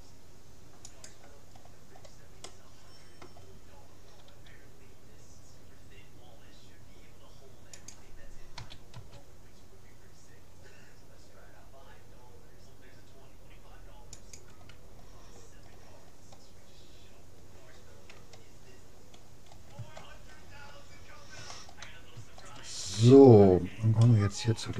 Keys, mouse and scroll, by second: 1.6 middle click, 1.9 click, 2.0 middle click, 2.8-4.2 drag, 4.3 g, 8.6 s, 15.8-18.0 middle drag, 18.2 a, 20.0-24.7 middle drag.